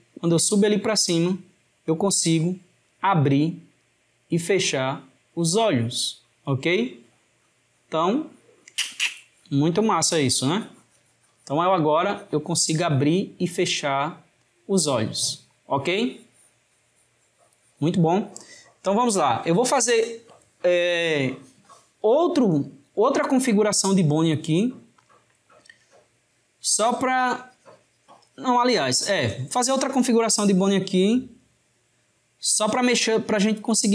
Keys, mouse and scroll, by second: 0.1 drag, 22.0 click, 30.8 click.